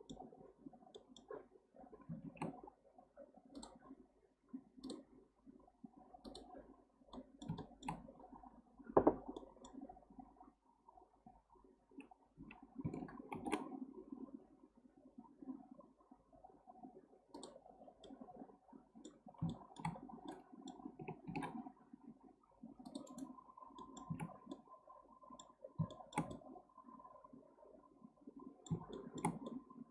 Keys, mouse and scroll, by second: 0.4-0.9 scroll down 1, 0.9-2.2 middle drag, 2.2 shift+s, 4.8-6.7 drag, 6.7-7.1 scroll up 2, 7.1-8.0 middle drag, 8.0-9.4 scroll up 1, 9.4 middle click, 12.5 s, 17.6-18.0 scroll down 1, 18.0-19.2 middle drag, 19.2 scroll down 4, 19.5 shift+middle click, 19.9-20.3 scroll up 3, 20.3 middle click, 21.2 ctrl+r, 23.8-24.2 middle drag, 24.2 Tab, 24.5-25.6 middle drag, 25.6 scroll down 1, 25.9-29.9 shift+middle drag.